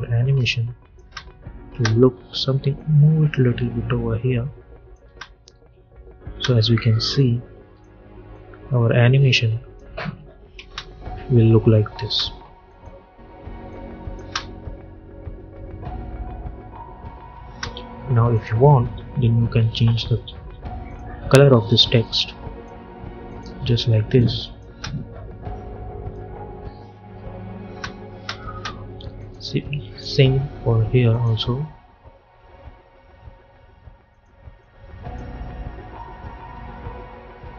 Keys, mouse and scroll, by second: 0.4 click, 0.9 space, 2.6-4.9 drag, 4.9 space, 7.1-10.1 drag, 10.1 [, 10.5 space, 12.6 click, 13.0 u, 13.6 click, 14.2 space, 17.3 space, 18.2 click, 20.7-24.6 drag, 24.6 space, 27.5 space, 29.1 click, 34.0-37.3 drag.